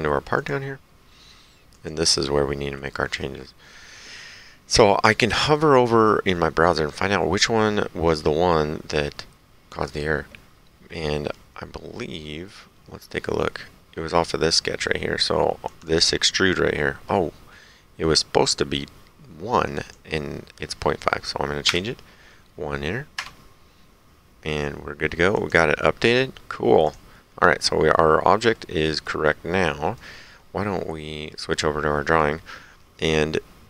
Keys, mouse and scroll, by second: 0.4 click, 1.7 click, 15.7 click, 19.8 click, 21.7 KP_1, 23.2 Return, 23.2 KP_1, 25.4 click, 26.9 click, 28.0 middle click, 29.1 right click, 31.3 click.